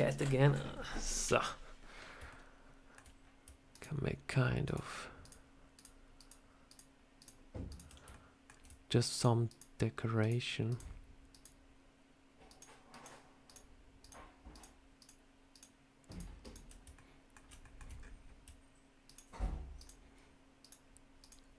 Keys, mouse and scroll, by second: 1.7-2.0 scroll up 1, 2.2 shift+middle click, 3.6 ctrl+right click, 5.2 ctrl+right click, 8.0 shift+middle click, 9.0 ctrl+right click, 12.4 ctrl+right click, 16.8 ctrl+middle click, 17.5 shift+middle click, 17.9-18.3 scroll up 4, 18.9 ctrl+right click.